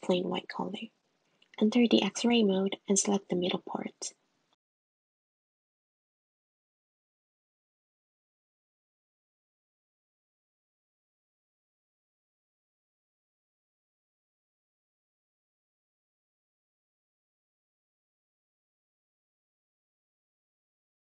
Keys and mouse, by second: 1.7 click, 3.8 Tab, 5.0 `, 6.0 click, 6.7 click, 7.4 click, 8.2 click, 9.9 click, 10.4 click, 11.1 click.